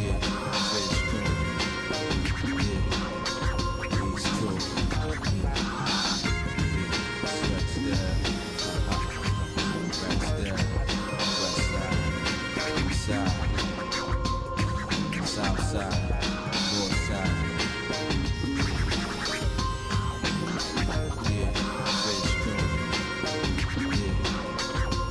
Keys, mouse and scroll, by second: 3.3-4.7 shift+middle drag, 5.6 g, 9.2 shift+middle click, 10.7 KP_1, 12.3 scroll up 1, 12.8-13.5 scroll up 4, 13.7 middle click, 18.0 scroll down 1, 18.3 shift+middle click, 18.9 scroll down 1, 19.2 middle click, 19.8-21.9 shift+middle drag, 22.1 scroll down 1, 22.2 scroll up 1, 22.3 scroll down 1, 22.5-22.9 scroll up 2, 22.9 click, 23.7-24.9 shift+middle drag.